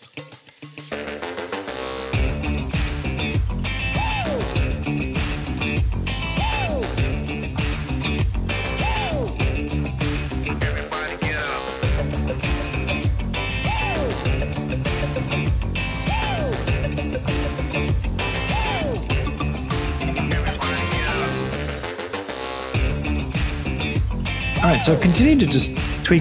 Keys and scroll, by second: 0.0-1.5 typing, 2.5-23.4 typing, 2.6 Escape, 15.8 Escape.